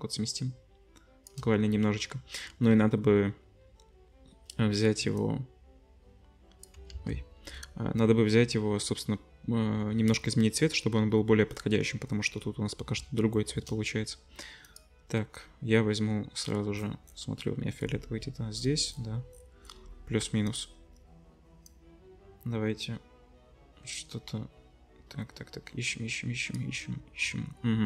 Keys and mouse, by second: 6.9 ctrl+z, 12.4 middle click, 12.9-13.6 shift+drag, 13.6-20.0 middle drag, 20.0-20.5 drag, 20.5-27.8 middle drag.